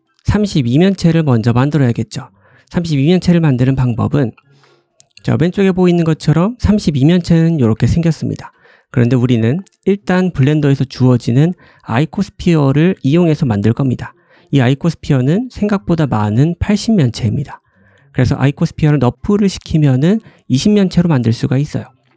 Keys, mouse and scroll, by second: 1.9-2.4 scroll up 1, 3.5-4.0 scroll up 1, 4.7 middle click, 6.6 click, 7.7 Tab, 8.5 Tab, 9.4 middle click, 11.3 click, 15.6 click, 17.7-18.3 drag, 20.0 click, 20.4-22.1 drag, 21.7 middle click, 21.7 right click.